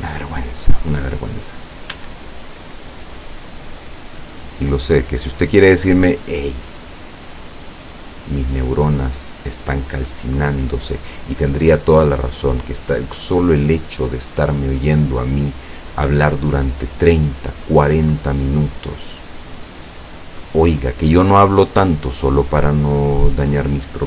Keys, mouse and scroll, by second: 2.0 s, 3.2 click, 4.0 middle click, 4.7 scroll up 1, 5.4-9.6 drag, 10.4-11.7 drag, 12.2 click, 13.2-15.2 middle drag, 15.6-17.7 drag, 18.2-20.6 drag, 21.4-22.9 drag.